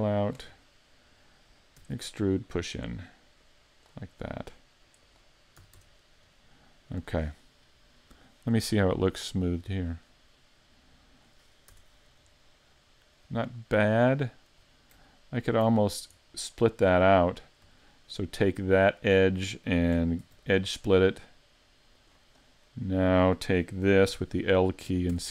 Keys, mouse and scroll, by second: 0.3 click, 0.7 middle click, 1.8 e, 2.0 click, 2.4 middle click, 3.4 click, 5.1 click, 5.6 a, 5.8 Tab, 6.0-6.4 scroll down 2, 6.4 middle click, 7.1-7.5 scroll down 3, 7.5 middle click, 9.4 click, 10.1 scroll up 4, 10.5 middle click, 11.5 scroll up 2, 11.7 Tab, 12.4 middle click, 13.4 shift+middle click, 13.5-14.0 scroll up 3, 14.3 shift+middle click, 15.5 alt+right click, 15.8 scroll down 3, 16.2 middle click, 17.2 middle click, 17.8 shift+middle click, 18.7 middle click, 20.2 ctrl+e, 22.7 middle click, 24.1 l, 25.1 s.